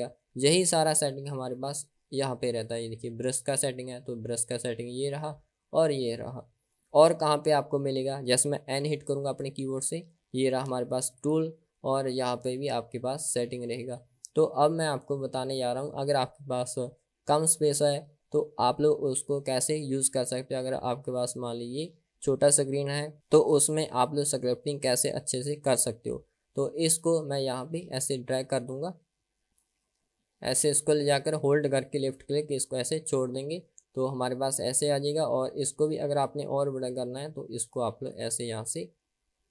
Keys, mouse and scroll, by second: 2.8-5.5 drag, 9.0 n, 11.3 click, 13.4 click, 27.7-28.7 drag, 29.4-32.9 drag, 38.2 click.